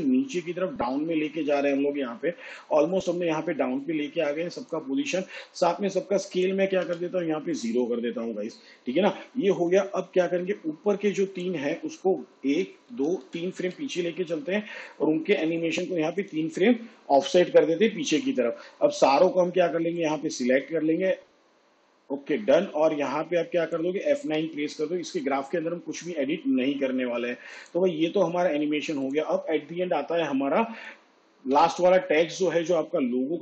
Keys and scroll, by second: 7.5 0, 13.1 ctrl+Right, 25.0 F9, 32.4 u.